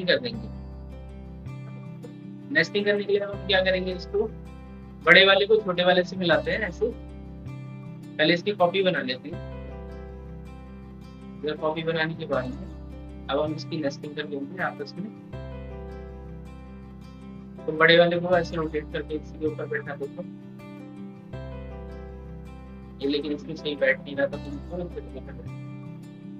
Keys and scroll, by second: 7.3 ctrl+z, 7.7 ctrl+z.